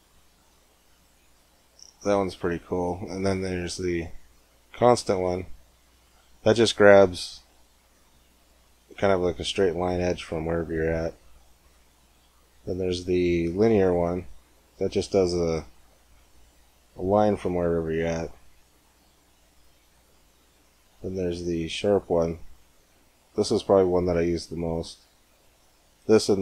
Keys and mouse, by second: 3.2-4.9 drag, 4.9 g, 11.7-13.9 drag, 14.0 g, 22.3 g.